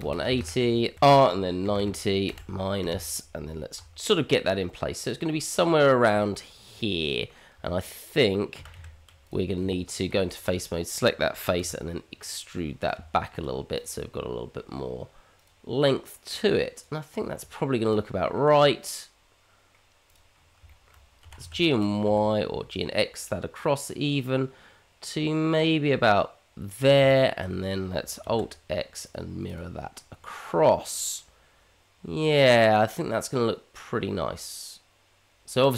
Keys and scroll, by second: 3.8 g, 6.4 g, 8.5 g, 9.6 Tab, 11.6 e, 12.9 Tab, 21.2 g, 28.4 alt+x.